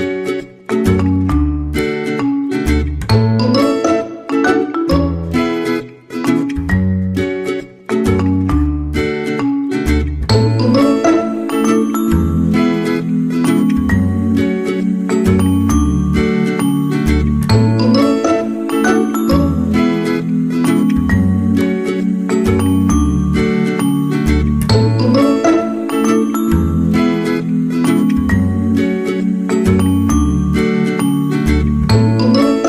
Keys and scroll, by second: 3.6 ctrl+z.